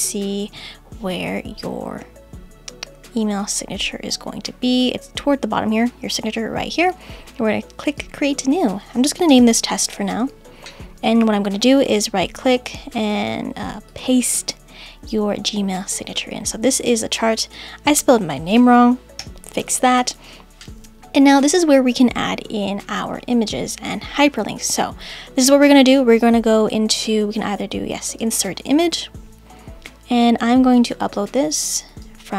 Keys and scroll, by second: 9.3 shift+t.